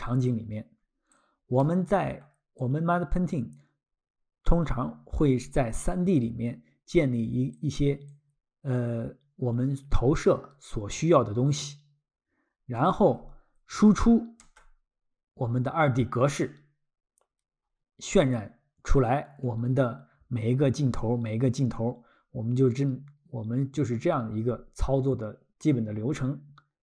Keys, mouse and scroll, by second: 1.2 ctrl+click, 1.6 ctrl+middle click, 2.6 ctrl+click, 7.6 ctrl+click, 8.1 ctrl+click, 10.9 ctrl+middle click, 12.8 ctrl+middle click, 14.4 Tab.